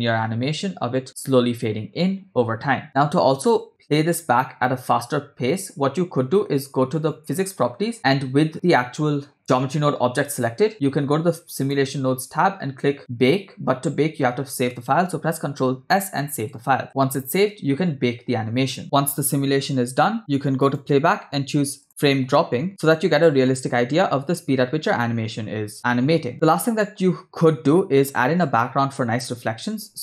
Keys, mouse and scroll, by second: 1.5-1.8 scroll down 2, 2.8 scroll down 1, 2.8 space, 3.7 space, 7.3 click, 11.6 click, 20.6-22.1 drag, 22.3 click, 23.3 space, 26.3-26.7 scroll down 2, 26.7 scroll up 1, 27.7-28.4 scroll down 3, 29.6 space.